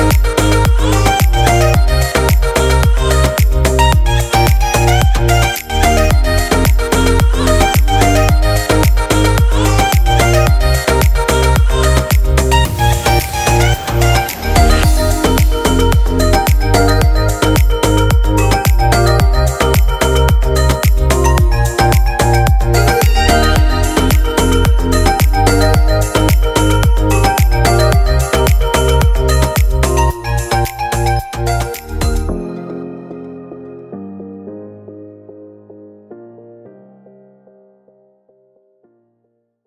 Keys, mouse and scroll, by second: 0.8 click, 1.8 click, 5.7 click, 8.0 shift+middle click, 8.3 scroll up 5, 8.5 shift+middle click, 9.5 Tab, 10.1 alt+a, 11.2 l, 12.9 p, 16.9 Tab, 17.5 alt+a, 18.1 click, 19.4 click, 19.5 click, 23.3 click, 24.2 click, 24.4 click, 25.4 BackSpace, 25.5 BackSpace, 27.4 alt+a, 27.7-28.1 scroll down 4, 28.1 shift+middle click, 29.0 click, 29.3 click, 30.4 click, 31.1 shift+middle click, 31.5 middle click, 34.4 shift+middle click, 34.8 shift+middle click, 35.4 middle click.